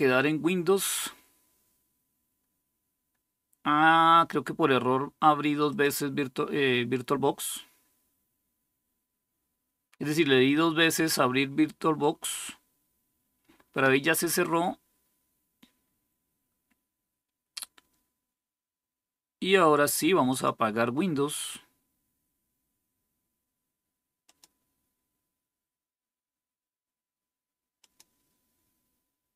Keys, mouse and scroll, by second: 5.4-20.4 drag, 24.0 click, 27.6-29.3 drag.